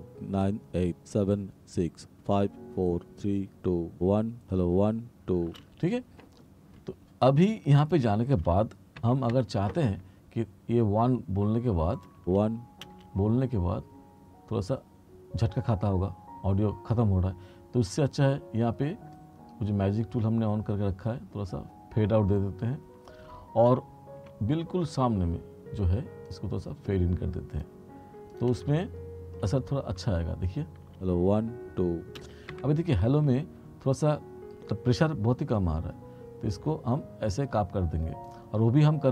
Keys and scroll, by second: 5.6 space, 9.1 t, 12.3 space, 23.8 r, 30.9 space, 32.3 space, 32.6 t.